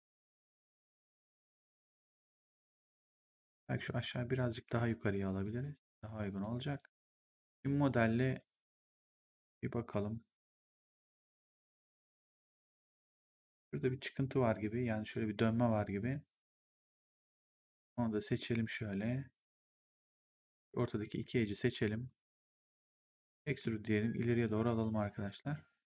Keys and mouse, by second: 3.4 right click, 3.8 click, 4.6 w, 5.3 click, 6.6 right click, 7.2 ctrl+1, 10.8 click, 15.9 click, 18.1 right click, 20.3 click, 20.9 click, 22.9 click, 23.4 w, 24.4 click.